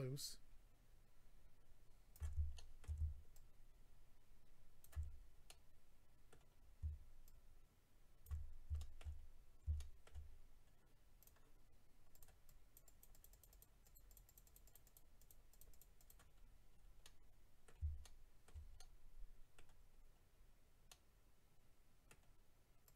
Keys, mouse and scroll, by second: 2.5 shift+middle click, 2.8 scroll up 1, 3.3 ctrl+click, 5.0-6.0 scroll down 4, 5.4 middle click, 6.5 scroll down 1, 7.2 ctrl+click, 7.8 scroll down 1, 8.8 shift+middle click, 9.2 scroll up 3, 9.8 shift+middle click, 10.6 scroll up 1, 11.2 click, 12.1 click, 12.2 click, 12.4 click, 12.8 click, 13.0 click, 13.1 click, 13.2 double click, 13.3 click, 13.4 click, 13.5 click, 13.6 double click, 13.8 click, 13.9 click, 14.0 click, 14.1 double click, 14.2 double click, 14.3 double click, 14.4 double click, 14.5 double click, 14.7 double click, 14.9 double click, 15.2 double click, 15.3 double click, 15.5 double click, 15.6 double click, 15.7 double click, 15.8 double click, 15.9 double click, 16.1 double click, 16.4-16.8 scroll down 4, 17.0 middle click, 17.0 scroll down 2, 18.0 shift+middle click, 18.4 middle click, 18.8 middle click, 20.0-20.8 scroll up 3, 20.9 middle click, 20.9-21.4 scroll up 1, 22.8 click.